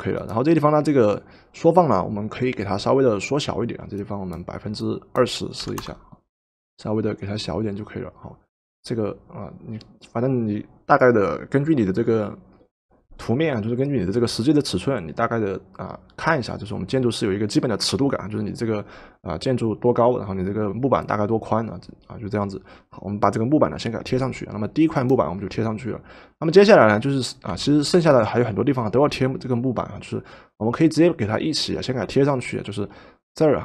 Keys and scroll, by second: 5.3-6.2 typing, 27.5 v.